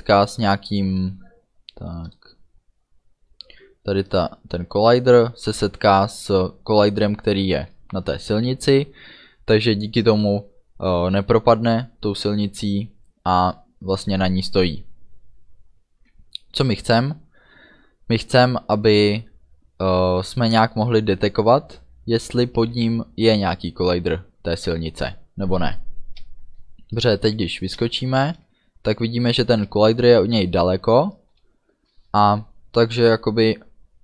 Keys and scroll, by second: 26.5 space, 27.4 d, 27.9 space.